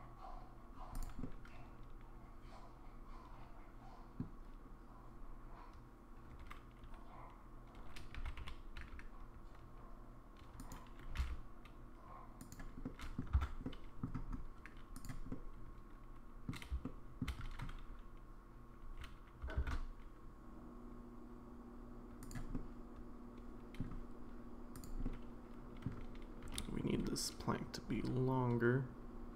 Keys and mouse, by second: 1.2-4.2 middle drag, 8.1 g, 11.1 g, 12.8 middle click, 13.3 Tab, 13.6 middle click, 14.9 click, 15.3-16.5 middle drag, 16.8 shift+middle click, 18.8 g, 22.5-23.8 middle drag, 25.0 middle click, 26.4 g.